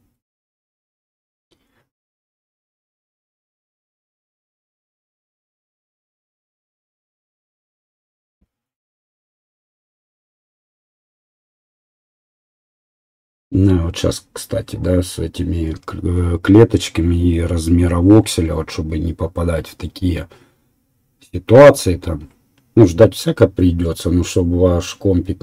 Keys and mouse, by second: 15.0-22.3 drag, 22.3-25.4 right drag.